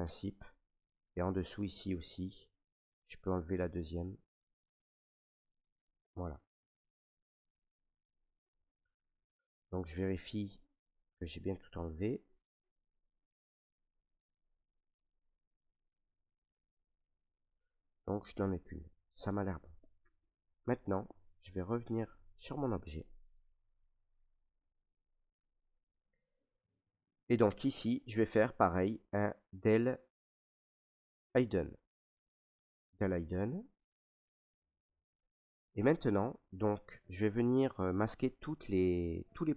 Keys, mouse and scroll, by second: 0.4 click, 1.4 alt+click, 2.9 click, 3.0 ctrl+right click, 3.8 ctrl+right click, 5.6 click, 7.3 ctrl+right click, 7.3 click, 8.6 right click, 9.8 ctrl+right click, 11.1 right click, 11.8 ctrl+right click, 12.4 alt+right click, 13.2 right click, 14.7 ctrl+right click, 15.6 right click, 16.9 alt+right click, 19.5 right click, 20.3 ctrl+right click, 21.0 right click, 22.2 right click, 22.3 ctrl+right click, 23.0 ctrl+right click, 24.5 right click, 25.1 alt+right click, 26.5 right click, 27.2 ctrl+right click, 30.1 right click, 32.4 click, 33.4 ctrl+right click, 34.1 right click, 34.9 ctrl+right click.